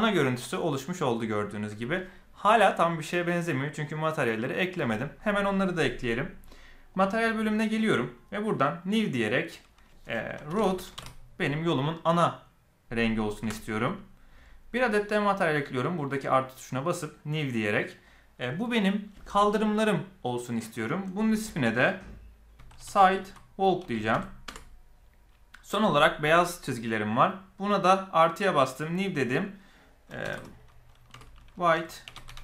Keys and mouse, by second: 6.9 click, 8.8 click, 9.5-13.5 drag, 15.3 click, 17.3 click, 18.0-25.1 drag, 27.0 click, 28.9 click, 29.4-32.4 drag.